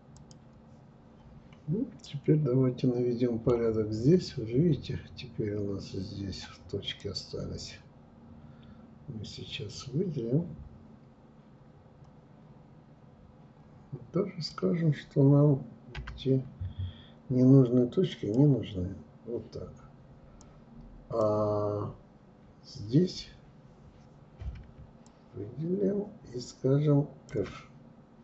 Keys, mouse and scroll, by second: 0.1-0.5 scroll up 6, 1.1-2.9 middle drag, 2.9-3.2 scroll up 1, 3.5-4.1 scroll up 2, 4.1-4.4 scroll down 2, 5.0-6.0 scroll up 1, 6.0-9.0 drag, 19.4-22.4 drag, 24.1-27.1 shift+drag, 27.4 f.